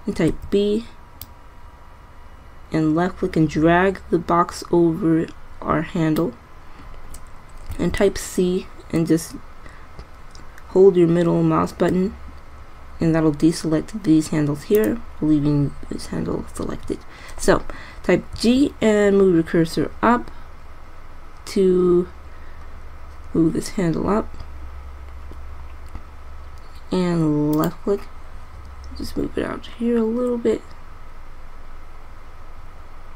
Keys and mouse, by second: 0.5 b, 8.0 c, 18.6 g, 29.4 g.